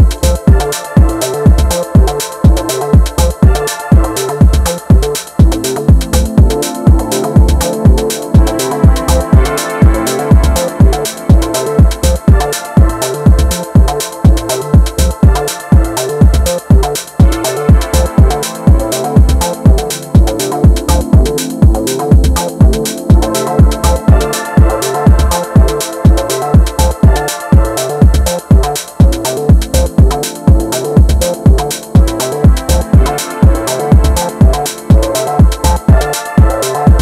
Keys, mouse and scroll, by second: 1.2 middle click, 1.8 KP_1, 2.3-2.9 scroll up 2, 2.9-5.9 middle drag, 5.9 alt+click, 7.5 KP_7, 8.3 r, 9.8-11.8 middle drag, 11.8 KP_1, 12.7 Tab, 13.1-15.2 middle drag, 15.2 KP_1, 15.8-19.4 shift+middle drag, 23.0-24.1 middle drag, 24.1 Tab, 24.4 middle click, 25.2 ctrl+r, 28.1-29.5 middle drag, 29.5 click, 30.6 ctrl+shift+click, 32.8 f, 33.2-34.4 middle drag, 34.4 Tab, 34.8-35.4 middle drag, 35.4 Tab, 36.9-37.0 middle drag.